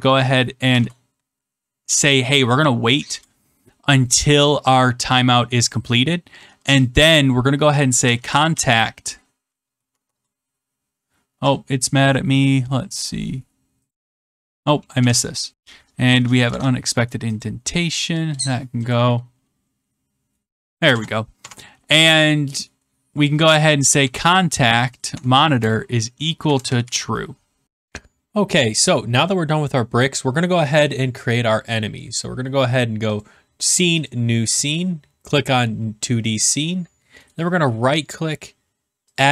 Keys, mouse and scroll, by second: 0.6 typing, 3.0 BackSpace, 7.7-9.7 typing, 13.9 click, 16.4 click, 16.5 Tab, 17.4 click, 17.9 click, 18.2 BackSpace, 18.8 click, 19.6 right click, 20.8 \, 21.3 BackSpace, 23.6-24.6 typing, 25.0 Tab, 26.1-27.4 typing.